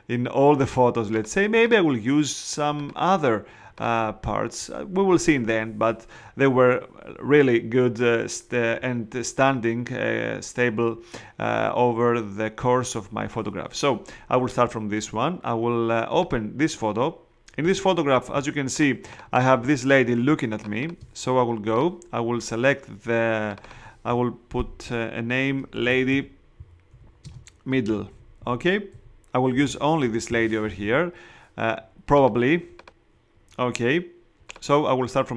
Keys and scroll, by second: 18.3 space, 25.5-30.1 typing.